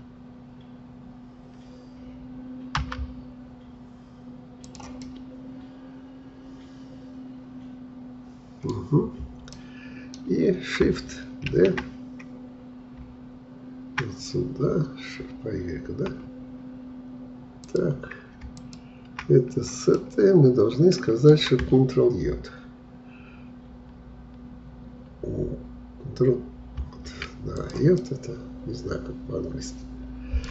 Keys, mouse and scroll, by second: 5.0-8.0 middle drag, 8.7-9.6 scroll down 1, 9.6-11.5 middle drag, 11.5 shift+d, 18.6-19.9 shift+drag, 19.9-22.9 middle drag, 26.8 ctrl+j, 27.6 click, 28.0-30.5 middle drag.